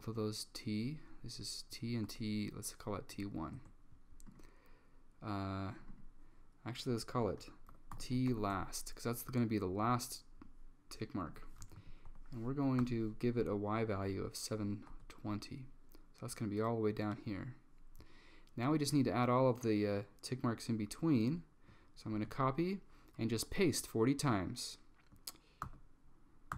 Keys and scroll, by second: 2.2 1, 3.6 Return, 7.2-9.1 typing, 11.7 Left, 11.8 Left, 12.1-12.9 typing, 15.0 Tab, 22.2 super+c, 25.7 super+v.